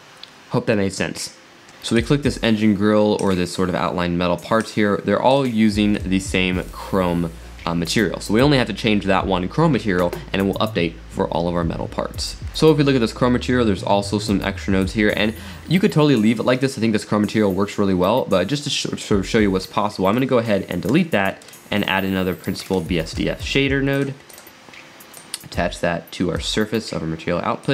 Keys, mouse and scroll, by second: 2.0 click, 3.2 click, 4.6 click, 5.4 click, 5.9 click, 6.6 click, 12.2-12.8 scroll down 7, 13.1-13.5 scroll up 7, 13.5-14.8 middle drag, 14.8 click, 16.7 scroll up 3, 17.4 scroll down 2, 17.7-19.0 middle drag, 19.2 middle click, 19.6-21.0 drag, 21.8 shift+a, 25.2 drag, 27.6 click.